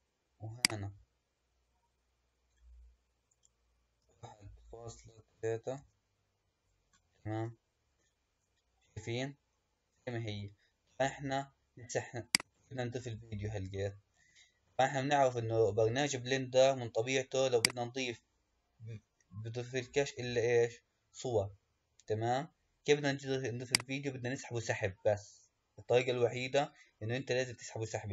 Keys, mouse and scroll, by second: 0.4-3.5 drag, 7.3-10.2 middle drag, 10.2 KP_1, 11.2-12.1 scroll down 1, 12.1 click, 14.9-15.8 scroll down 2, 15.8-17.5 scroll down 1, 17.5-20.6 drag.